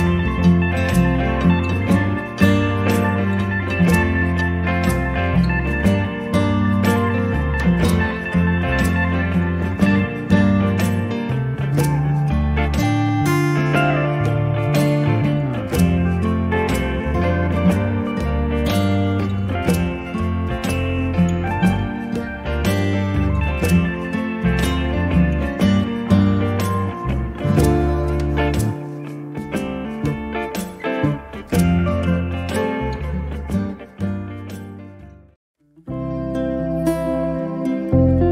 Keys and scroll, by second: 17.3 q, 17.9 space, 20.0 q, 22.3-24.0 typing, 35.0 m.